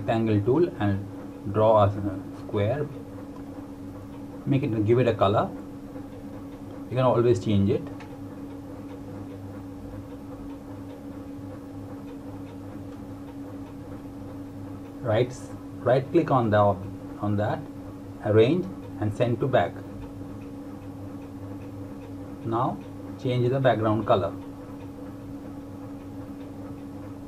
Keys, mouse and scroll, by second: 12.1 click, 15.9 click, 16.7 right click, 20.4 click, 25.1 click.